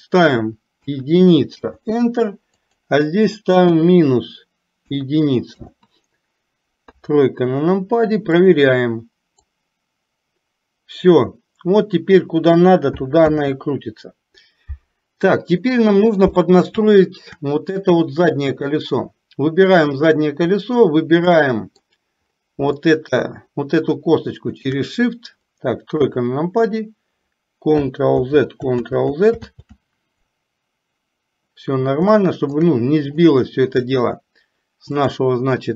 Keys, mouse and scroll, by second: 2.7-5.7 drag, 7.0 KP_3, 8.5 click, 9.6-12.2 drag, 15.7 middle click, 17.0 shift+middle click, 21.5 middle click, 23.0 shift+middle click, 24.5 shift+click, 26.1 KP_3, 28.3 ctrl+z, 29.0 ctrl+z, 29.7 ctrl+z, 32.2-32.6 shift+middle drag, 35.1 click.